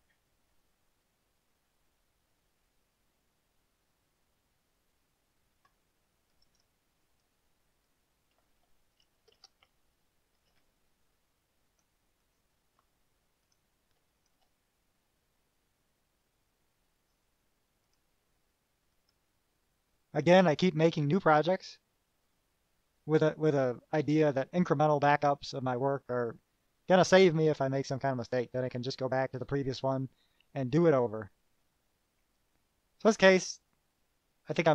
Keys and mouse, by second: 6.5 click, 6.6 middle click, 7.2 right click, 8.2 click, 9.5 shift+p, 9.9 shift+0, 10.7 2, 11.9 click, 12.4 click, 13.6 click, 14.5 shift+drag, 15.6-17.4 drag, 18.0 click, 19.3 click, 20.7 click.